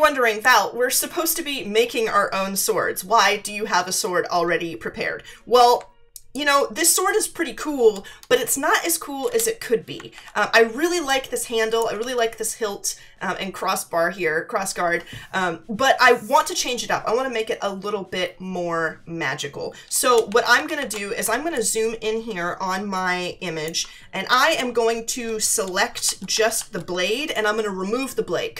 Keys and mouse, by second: 6.3 alt+click, 9.2 Return, 10.1 ctrl+=, 11.0 space, 11.0 click, 20.2 ctrl+=, 21.3 space, 21.5 click, 23.6 space.